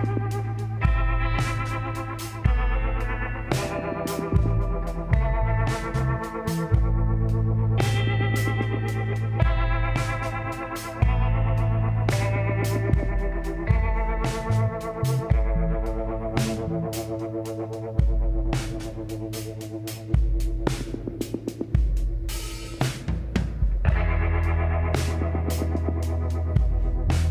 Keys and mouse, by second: 3.9 click, 4.5 middle click, 5.5 click, 11.7 click, 12.0 z, 15.3 ctrl+r, 19.1 s, 25.2-27.3 drag, 26.4 b.